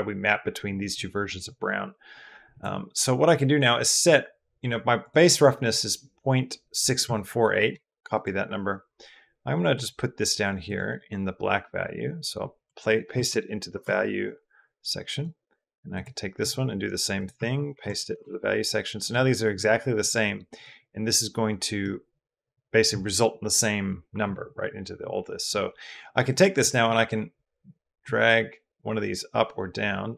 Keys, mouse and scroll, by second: 2.3 click, 3.5 drag, 5.0-8.0 drag, 9.5 click, 10.5 drag, 15.8 click, 16.2 click, 18.8 click, 19.8 click, 20.4-21.7 drag, 26.4 click.